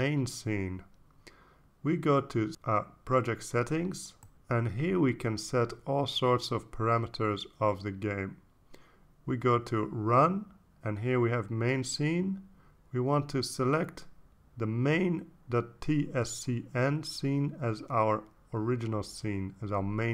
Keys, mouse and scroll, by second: 3.2 click, 4.3 click, 4.7 click, 5.9 click, 7.9 click, 11.3 click, 12.8 click, 16.1 click, 17.0 click, 18.2 click.